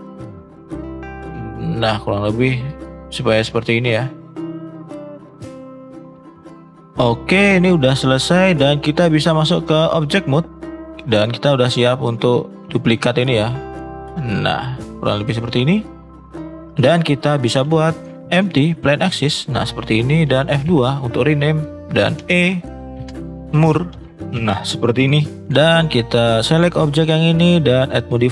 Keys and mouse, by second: 0.1-2.3 drag, 4.9 middle click, 5.4 middle click, 6.0 middle click, 8.4 middle click, 9.3-10.0 drag, 10.5 middle drag, 11.4 click, 11.9 middle drag, 13.8 middle drag, 14.4-15.3 middle drag, 15.8 middle click, 17.6 shift+a, 20.6 F2, 26.1 click, 27.5-28.3 drag.